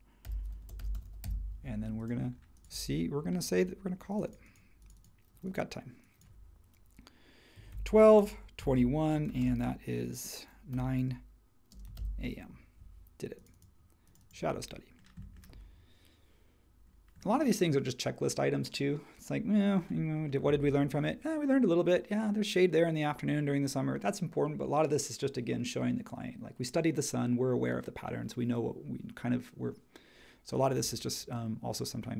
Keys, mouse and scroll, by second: 0.2-1.7 typing, 7.3-12.4 typing.